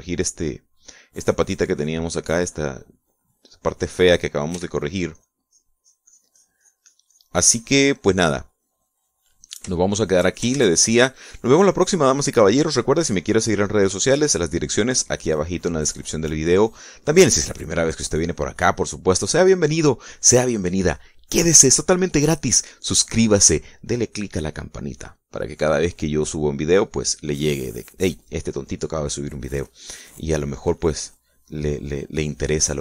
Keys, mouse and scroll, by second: 1.7 click, 3.1 click, 4.9 click, 5.9 f, 6.5 click, 6.9-9.9 drag, 10.0-11.1 middle drag, 11.2 shift+middle click, 11.9 ctrl+shift+s, 12.1 ctrl+shift+click, 13.4-14.5 drag, 31.0-32.5 drag.